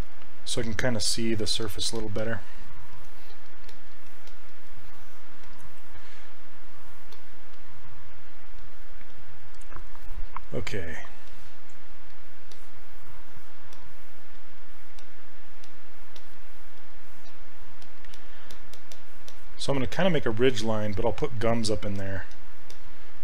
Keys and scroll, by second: 14.4 s.